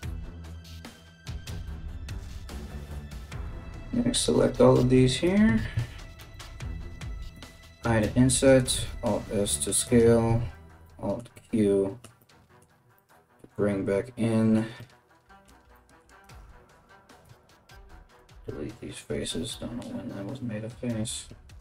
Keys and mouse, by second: 0.0 right click, 0.3 right click, 1.0 right click, 1.2 shift+right click, 1.5 g, 2.0 3, 2.2 right click, 2.5 shift+right click, 2.8 shift+right click, 3.1 shift+right click, 3.7 shift+right click, 4.0 shift+right click, 4.3 right click, 4.5 middle click, 4.5 right click, 4.7 middle click, 5.2 ctrl+z, 5.4 shift+right click, 5.6-21.6 middle drag, 7.0 i, 8.4 alt+s, 9.9 alt+q, 10.2 alt+q, 15.8 right click, 16.8 x.